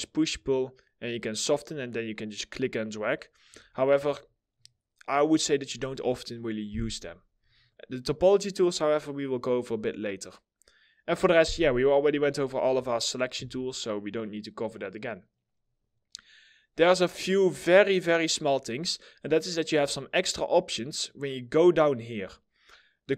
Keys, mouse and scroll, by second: 2.6-3.1 scroll up 1, 3.3 alt+middle click, 13.0 2.